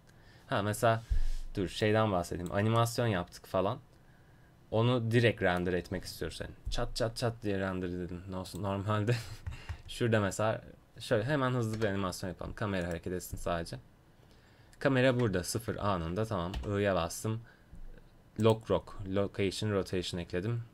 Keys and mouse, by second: 1.8 click, 2.8-3.8 middle drag, 8.5-11.8 drag, 11.8 KP_0, 12.9-14.6 drag, 16.6 i.